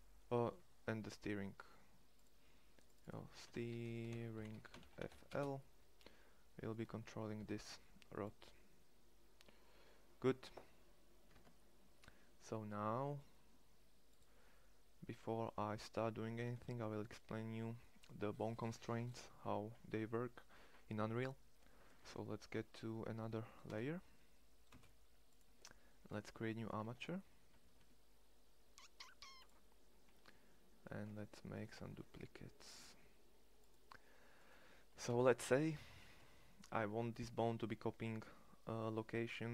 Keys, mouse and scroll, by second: 3.7 e, 7.0 ctrl+l, 11.0 ctrl+Tab, 13.8-22.3 drag, 23.3 2, 24.3 space, 26.5 shift+q, 27.2 shift+a, 30.7 Tab, 31.5 shift+d, 32.5 shift+d, 34.2 right click.